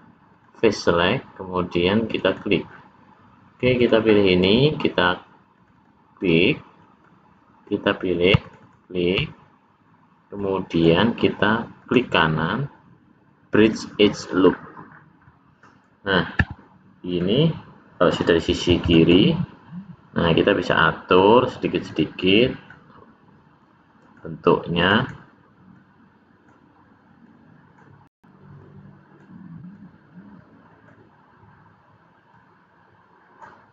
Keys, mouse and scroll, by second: 1.0 scroll up 2, 2.1 click, 2.3 click, 3.8 click, 5.5 click, 5.8 click, 6.4 middle click, 8.4 shift+click, 8.6 click, 10.4 middle click, 10.9 scroll up 1, 11.8 right click, 14.4-15.0 scroll down 4, 15.0 scroll up 1, 15.2 middle click, 18.8 click, 19.0 click, 20.2 click, 21.9 click, 23.6 click, 24.8 click, 25.0 click, 25.7 click, 27.2 click, 28.5 click, 29.6 click, 32.2 click.